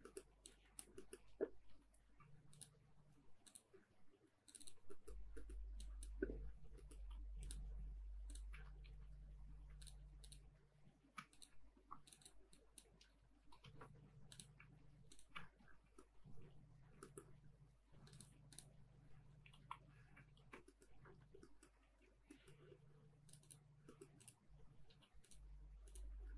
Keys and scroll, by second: 3.7 space, 3.9 Escape, 8.6 space, 8.8 Escape, 11.7 Delete, 15.4 space, 15.5 Escape, 19.6 Delete, 20.3 ctrl+z, 20.8 Escape, 21.8 ctrl+s, 26.2 space.